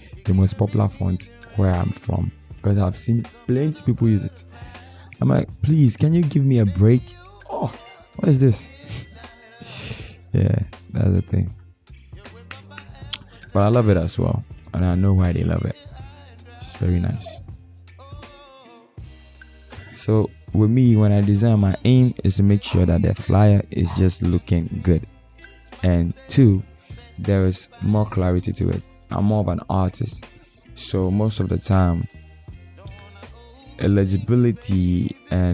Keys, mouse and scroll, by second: 3.5 ctrl+a, 27.1 Return, 28.6 double click.